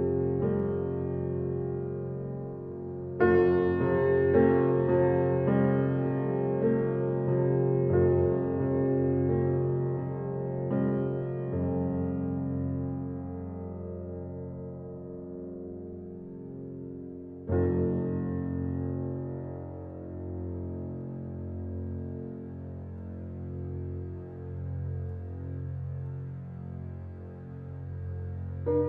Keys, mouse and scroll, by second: 1.4-2.8 middle drag, 2.8-11.4 drag, 12.4 middle click, 13.7 click, 14.0-14.7 scroll down 9, 14.7 click, 14.8-16.8 shift+middle drag, 16.8-19.3 scroll down 3, 19.4 click, 19.8 click, 21.2 Tab, 27.0 shift+d.